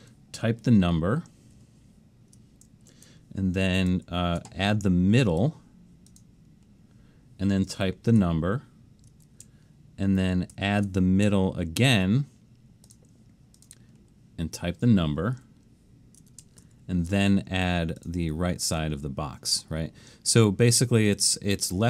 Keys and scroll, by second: 1.6 shift+1, 3.9 alt+shift+super+s, 10.6 alt+shift+super+s, 16.6 alt+shift+super+s.